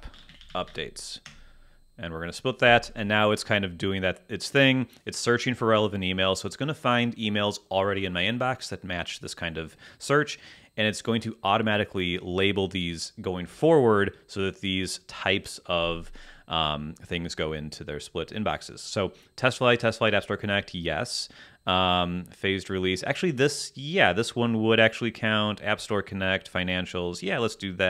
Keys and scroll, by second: 0.0-1.5 typing, 1.7 Return.